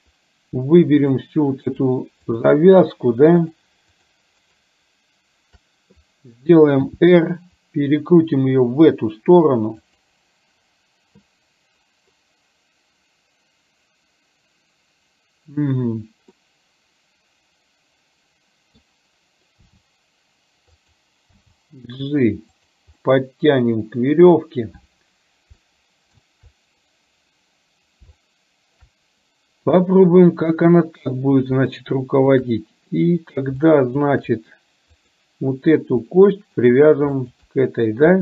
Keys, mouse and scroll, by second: 1.1 shift+click, 1.8 shift+click, 2.3 shift+click, 2.9 shift+click, 4.1 shift+click, 4.4 shift+click, 6.8 r, 16.6-18.9 middle drag, 19.7 r, 21.4 g, 23.2-24.4 middle drag, 25.7 shift+middle click, 28.3 shift+middle click, 31.8 shift+middle click, 33.8 shift+middle click, 35.1 click, 36.3 shift+middle click, 37.3 shift+click.